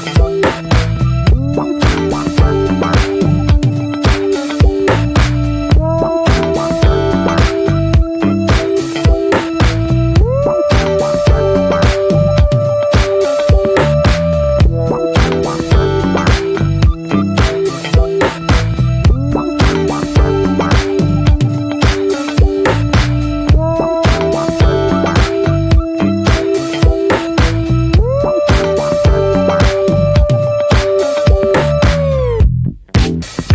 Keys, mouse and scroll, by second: 0.8-2.4 drag, 2.4 middle click, 3.2-3.6 drag, 3.6 Tab, 4.0-4.6 middle drag, 4.9 alt+middle click, 5.6-6.4 scroll down 5, 5.9 n, 6.4 Tab, 6.7-7.3 shift+middle drag, 7.3 ctrl+s, 8.2-9.6 scroll up 4, 8.8 middle click, 9.6-9.9 alt+middle drag, 10.3-11.4 shift+middle drag, 11.4 click, 11.8 alt+middle click, 12.6 click, 13.6-14.3 shift+middle drag, 14.3 click, 15.0-17.2 drag, 17.4 middle click, 17.7 e, 19.3 click, 19.8 alt+shift+click, 20.2 middle click, 20.5 e, 22.6-22.9 middle drag, 22.9 click, 23.1 scroll up 1, 23.4-25.5 shift+middle drag, 25.5 shift+d, 26.2-26.7 middle drag, 26.7 scroll up 1, 27.0 s, 28.7 middle click, 29.1 e, 30.1-30.8 middle drag, 30.8 click, 31.6 alt+z, 31.8-32.7 middle drag, 32.7-33.0 drag, 33.0 middle drag, 33.3 alt+z.